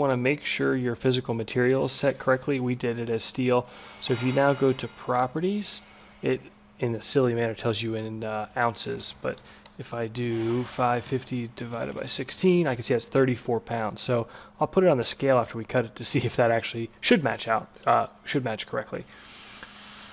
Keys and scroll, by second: 8.9 Return, 10.2 shift+super+Right, 10.7 5, 11.0 0, 11.7 /, 11.9 6, 12.1 Return.